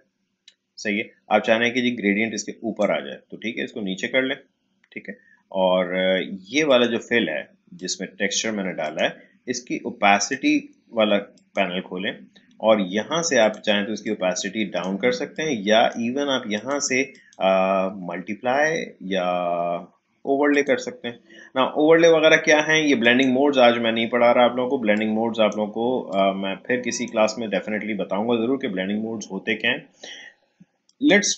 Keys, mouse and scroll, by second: 1.7-5.3 drag, 6.7-16.5 drag, 20.5 click, 23.0-29.7 drag, 30.8 click.